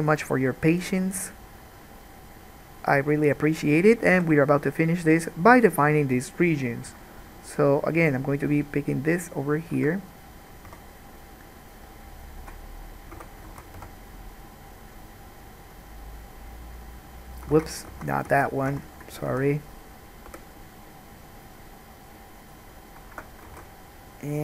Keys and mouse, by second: 4.3 k, 10.9 3, 11.9 click, 12.3 shift+middle click, 13.3 f, 13.6 alt+a, 13.9 1, 17.7 ctrl+z, 17.8-23.8 ctrl+drag, 18.1 ctrl+z, 18.4 ctrl+z, 18.9 ctrl+z, 19.5 alt+a, 20.4 k, 23.7 alt+a.